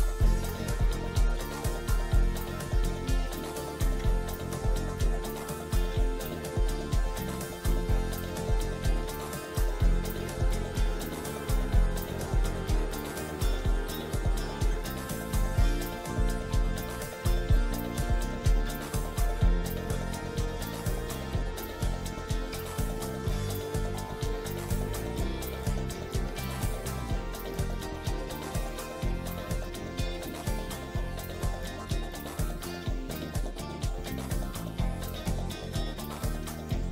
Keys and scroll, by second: 0.3 t, 0.6 r, 1.1 shift+F2, 1.6 Escape, 5.6 l, 6.1 Escape, 8.3 l, 8.9 Escape, 16.0 Delete, 32.5 space, 34.6 shift+Page_Up, 35.5 F4, 36.0 Escape.